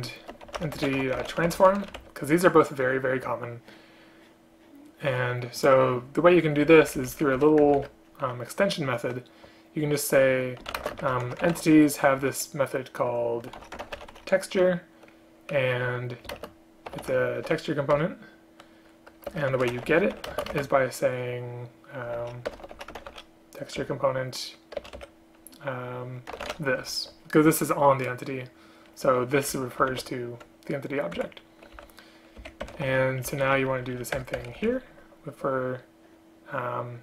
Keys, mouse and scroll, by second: 7.0 Up, 7.5 End, 7.8 Return, 8.0 Return, 10.9 space, 16.5 shift+space, 18.1 Return, 19.4 Return, 19.6 Tab, 20.4 shift+space, 22.6 BackSpace, 23.9 Return, 24.9 BackSpace, 29.6 Left, 30.0 ctrl+q, 31.3 Escape, 31.9 End, 32.5 shift+Up, 32.8 shift+Home, 33.1 ctrl+c, 33.4 Down, 33.6 Down, 33.7 Down, 34.3 Return, 34.5 Return, 34.7 Up, 34.8 ctrl+v.